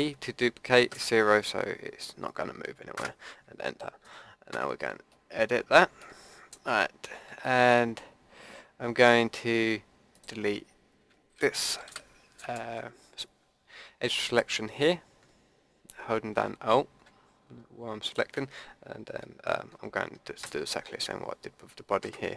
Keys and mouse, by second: 4.5 Tab, 5.1-7.7 drag, 10.1-12.1 drag, 11.8 Delete, 18.0-19.9 drag, 20.4 ctrl+KP_Add.